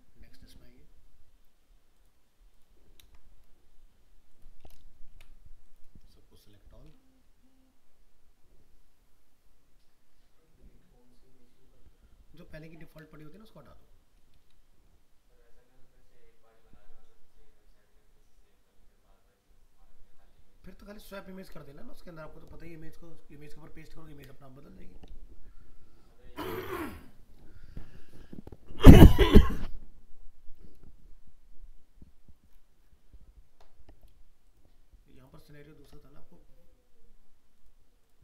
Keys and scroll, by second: 3.0 ctrl+v.